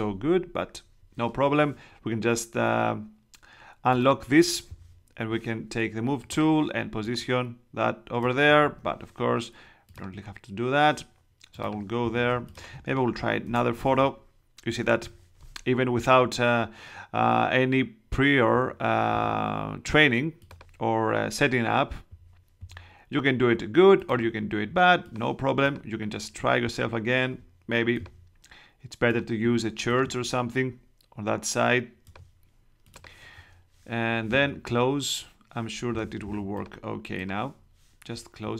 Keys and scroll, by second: 8.6 super+z, 12.2 space, 13.5 super+BackSpace, 13.8 super+Tab.